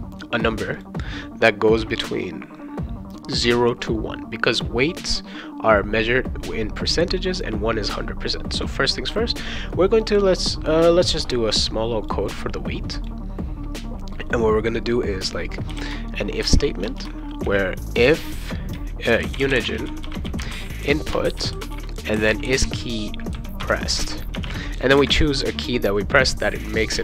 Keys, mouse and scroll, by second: 0.8 click, 12.0 click, 12.3 click, 12.9 click, 15.4-17.4 typing, 18.8-23.0 typing, 23.6 Return, 24.1-24.9 typing.